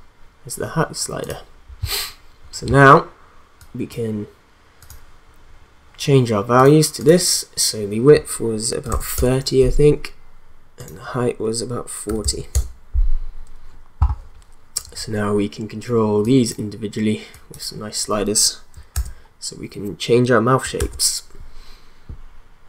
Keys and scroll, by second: 8.6-9.5 typing, 11.8-12.7 typing, 18.9 ctrl+z, 20.7 ctrl+z.